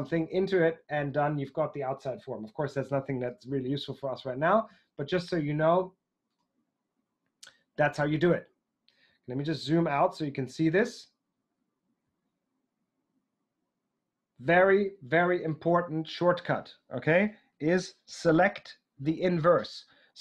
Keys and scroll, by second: 3.4 super+z, 4.7 super+z.